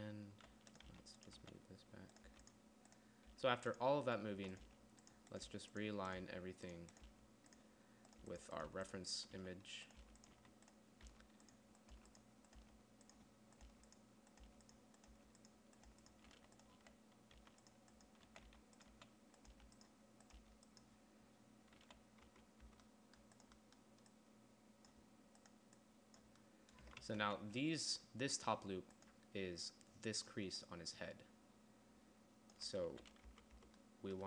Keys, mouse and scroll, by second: 0.0-2.7 typing, 3.8-7.5 typing, 8.7-13.1 typing, 14.2-20.9 typing, 22.2 z, 22.7 Tab, 23.2 Tab, 27.4 KP_1, 27.7 z, 29.9-33.1 d, 33.3 z, 33.8 Tab, 34.1 Tab.